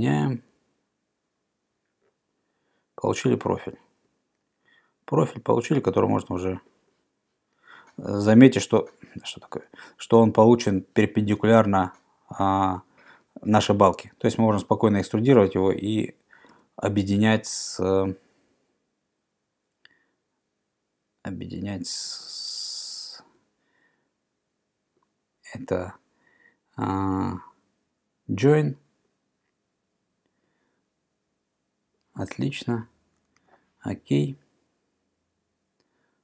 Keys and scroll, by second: 3.3 Escape, 16.6 e, 33.4 Return.